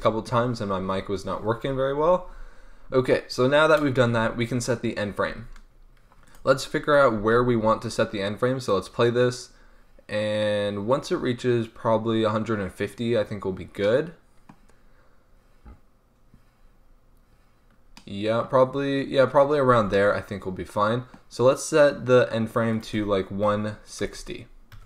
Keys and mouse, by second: 0.0 Return, 6.2-10.3 drag, 7.1 alt+a, 10.7-14.0 middle drag, 16.1-18.2 middle drag, 19.7 alt+a, 22.7-24.8 drag.